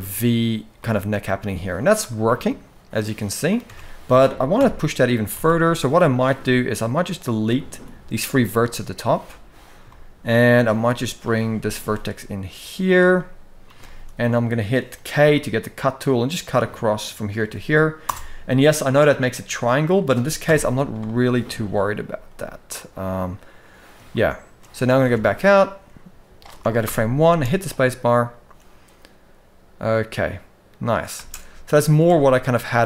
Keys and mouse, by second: 0.5-1.0 middle drag, 1.8-3.3 middle drag, 3.4 Tab, 4.3 KP_4, 4.3 KP_1, 5.1 alt+a, 6.4 shift+click, 6.9 shift+click, 7.4 x, 9.3 click, 9.6 shift+middle click, 10.5 g, 12.9 middle click, 13.6 shift+middle click, 14.3 middle click, 14.9 k, 19.5 middle click, 20.2 KP_1, 21.4 click, 21.8 g, 23.8 shift+middle click, 25.5 Tab, 26.7 shift+Left, 27.1 space, 31.3 space, 31.5 middle drag, 31.8 alt+a, 32.3-32.7 middle drag.